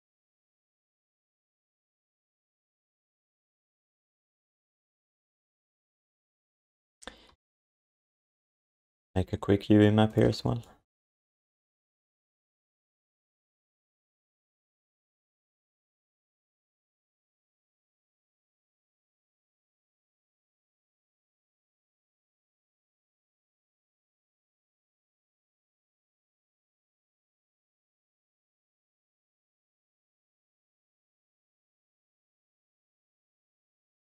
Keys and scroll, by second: 4.2 q, 4.9 alt+shift+d, 5.1 ctrl+s, 7.3 u, 11.6 ctrl+s, 12.2 f, 16.8 s, 19.0 s, 20.5 s, 31.7 f, 34.0 ctrl+s.